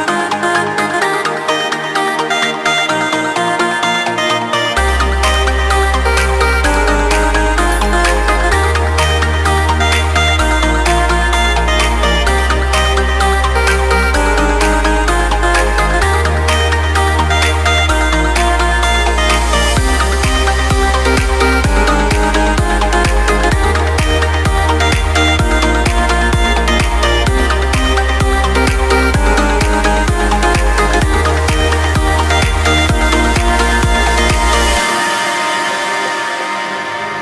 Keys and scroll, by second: 1.8 ctrl+g, 2.2 ctrl+space, 10.4 ctrl+space, 11.0 ctrl+y, 12.2 ctrl+y, 12.6 ctrl+space, 16.0 ctrl+space, 17.7 ctrl+;, 18.2 ctrl+space, 22.4 ctrl+;, 23.7 ctrl+space, 25.2 ctrl+c, 25.9 ctrl+space, 26.7 ctrl+v, 30.9 ctrl+space, 35.0 ctrl+;, 35.3 ctrl+space.